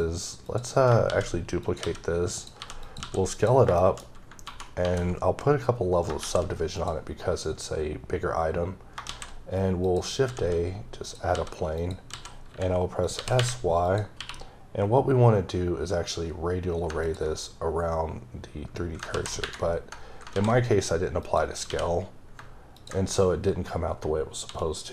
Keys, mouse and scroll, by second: 0.5 click, 1.1 d, 1.6 click, 1.8 s, 2.3 click, 2.6 g, 2.8 click, 3.0 s, 3.3 click, 3.8 shift+middle click, 4.0 scroll up 3, 4.5 ctrl+1, 5.2-6.0 scroll down 2, 6.0 scroll down 1, 6.2 shift+s, 6.7 click, 8.0-8.3 scroll up 1, 9.0 shift+a, 9.8 click, 10.3 s, 11.0 click, 11.3 s, 11.8 click, 12.1 s, 13.0 click, 13.2 g, 13.9 click, 14.2 q, 16.9 q, 17.0 ctrl+click, 19.1 z, 21.2 click, 21.7 q, 22.7 ctrl+click, 24.4 d.